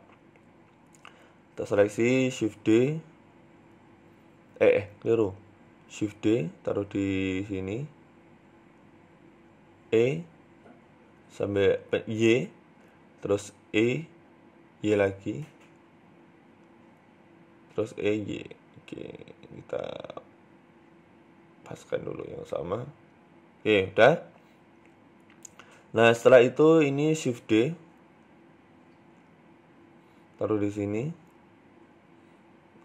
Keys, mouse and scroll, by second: 0.1 Tab, 0.4-0.9 scroll up 3, 1.3 a, 2.8 shift+middle click, 3.6 shift+a, 4.3 ctrl+z, 5.7 shift+d, 9.1 right click, 9.7 e, 11.5 y, 13.2 right click, 13.9 ctrl+z, 14.5 g, 15.8 e, 17.4 e, 19.2 right click, 21.0 right click, 22.8-23.3 scroll down 2, 23.0 Tab, 23.3 middle click, 24.4 Tab, 25.2 middle click, 26.0 right click, 26.5 right click, 27.3 KP_3, 28.2 middle click, 28.9 KP_3, 29.9 shift+d, 31.4-31.8 scroll up 4, 32.0 right click.